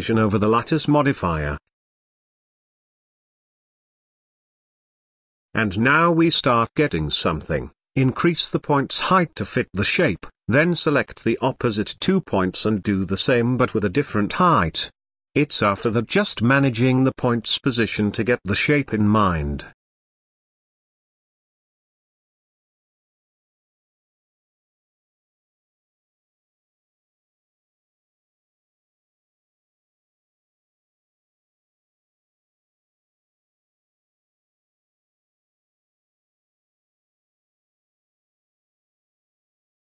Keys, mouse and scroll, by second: 0.0 click, 2.8-3.8 drag, 4.3-5.2 drag, 6.3-8.5 middle drag, 8.5-9.0 scroll down 3, 9.0 click, 9.6 Tab, 10.2 shift+middle click, 10.5 scroll up 2, 12.1-13.4 scroll down 1, 13.4 scroll down 1, 13.5 KP_1, 14.7 g, 18.6-20.7 middle drag, 21.1-21.7 scroll up 3, 21.7-23.0 middle drag, 23.0 click, 23.7-24.9 middle drag, 24.9 shift+click, 25.4 scroll down 2, 25.6-26.8 middle drag, 26.8 KP_1, 27.2-27.6 scroll down 4, 27.7 shift+middle click, 28.2 g, 30.2-30.8 scroll up 4, 31.5 click, 31.8 middle click, 32.8 KP_3, 33.2-33.7 scroll up 4, 33.7 g, 35.1 shift+middle click, 36.2 ctrl+click, 36.3 click, 36.7 middle click, 37.6 shift+click, 38.0 middle click, 38.6 shift+click, 39.2 KP_3, 39.4-39.7 scroll up 1, 39.7 g.